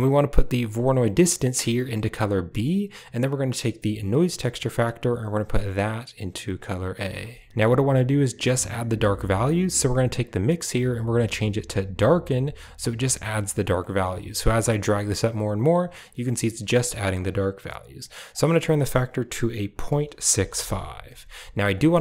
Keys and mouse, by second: 1.4-2.4 drag, 4.0 drag, 4.7-6.1 drag, 6.4 click, 9.8-12.0 drag, 13.7-17.1 drag, 18.2-20.4 drag, 21.6 click, 21.9 middle click.